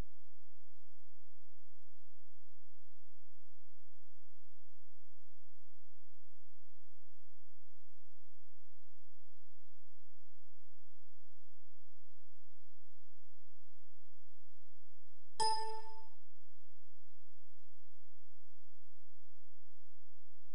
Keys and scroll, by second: 7.7 ctrl+z, 15.3 q, 19.7 space.